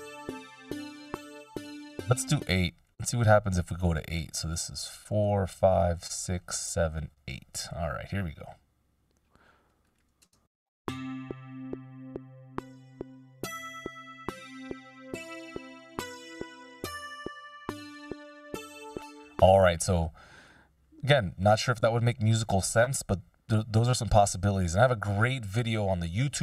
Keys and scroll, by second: 1.8 space, 10.4 shift+space, 18.5 space, 24.2 BackSpace.